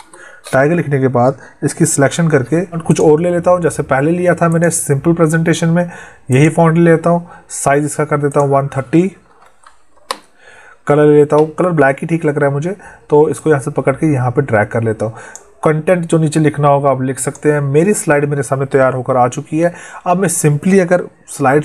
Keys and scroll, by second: 1.8 ctrl+shift+Left.